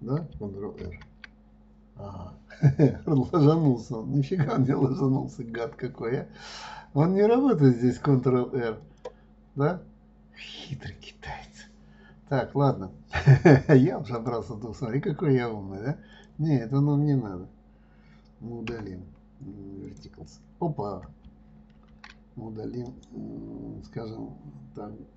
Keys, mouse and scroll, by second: 14.5 click, 16.5 click, 19.1 Delete, 23.3 right click.